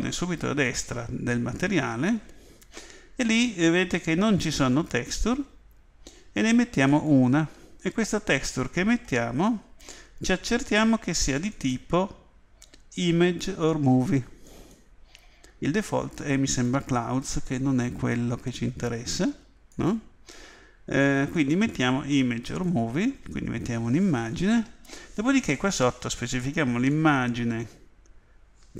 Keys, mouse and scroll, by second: 21.3 click, 26.9 click.